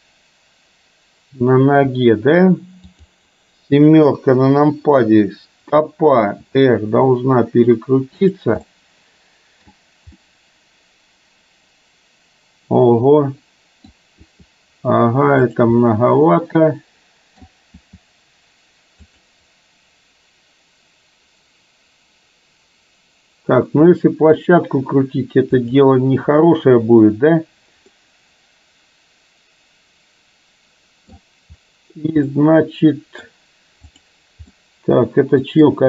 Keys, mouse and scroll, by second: 2.9 click, 4.1 KP_7, 6.6 r, 8.7-9.7 middle drag, 10.3-13.9 middle drag, 14.2 r, 15.9-17.9 middle drag, 17.9 r, 24.1 middle click, 25.7 click, 27.9-31.2 middle drag, 32.3-33.3 middle drag, 33.9 click, 34.6-35.7 middle drag.